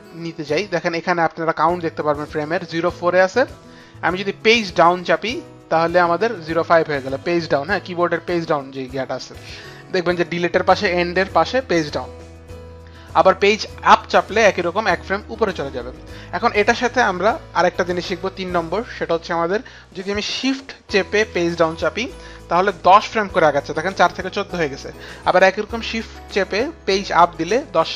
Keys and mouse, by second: 4.4 Page_Down, 13.3 Page_Up, 15.8 Page_Up, 21.7 shift+Page_Down, 26.7 shift+Page_Up.